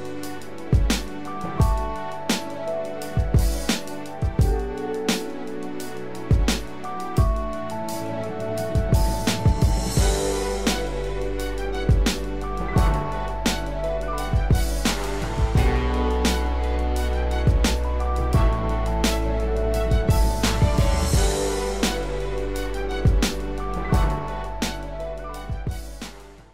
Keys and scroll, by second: 20.4 ctrl+=.